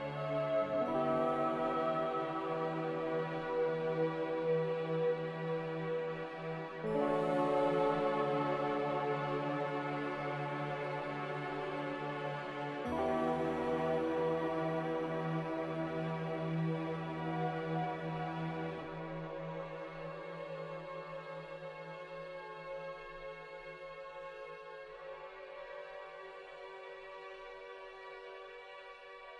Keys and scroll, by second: 0.4 z, 2.8-3.5 typing, 7.4 z, 9.8-11.1 typing, 11.3 Return, 12.7-13.5 typing, 14.5 ctrl+z, 15.5 Escape, 18.3-19.0 typing, 21.9 Escape, 24.8-25.5 typing, 27.0 a.